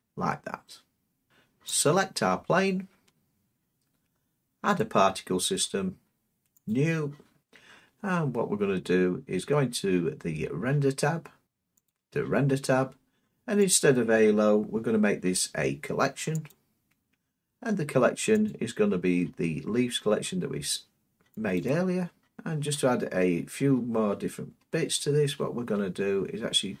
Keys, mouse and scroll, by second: 0.1-1.3 scroll up 4, 1.3 middle click, 1.9-2.9 drag, 4.8-5.9 drag, 6.7 click, 8.6-10.1 scroll up 3, 10.1 scroll up 1, 10.3-11.4 middle drag, 11.9 click, 12.5 middle click, 13.0 scroll, 14.5 click, 16.5 click, 17.4 click, 18.5-19.5 drag, 21.5 click, 22.4 scroll, 22.5 scroll, 22.6 scroll, 22.9 scroll, 23.1-24.6 scroll down 14, 24.6-26.8 scroll up 15.